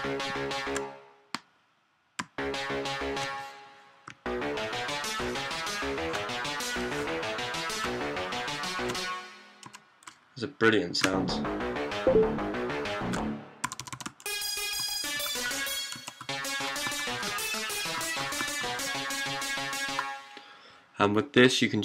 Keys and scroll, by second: 0.0-9.5 typing, 10.9-20.0 typing.